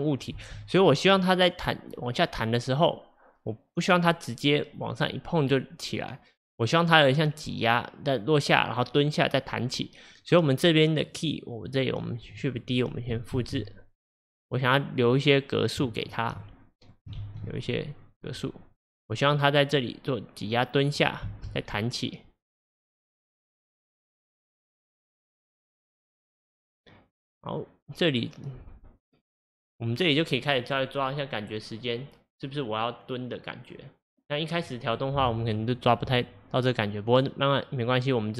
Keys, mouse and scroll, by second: 0.4 space, 1.2-4.3 drag, 12.1-13.4 drag, 13.4 shift+d, 16.5 click, 17.3 shift+d, 19.2-21.3 drag, 21.3 space, 30.4 scroll down 1.